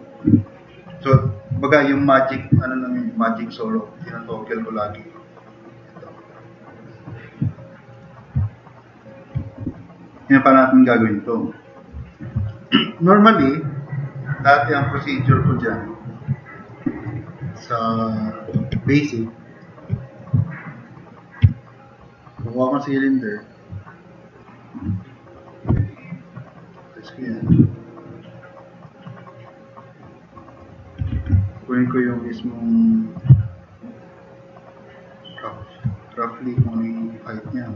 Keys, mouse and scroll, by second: 0.4-1.0 drag, 8.5 click, 8.7 click, 12.5 scroll up 2, 12.8 scroll down 2, 16.6-17.1 drag, 18.9 click, 20.1 click, 21.4 Delete, 25.8 t, 26.0-26.6 drag, 27.0-27.4 drag, 28.8-29.4 drag, 29.5 click, 31.1 e, 31.9-32.9 drag, 33.4-34.1 drag, 34.5 click, 34.6-35.2 drag, 36.6-37.7 drag.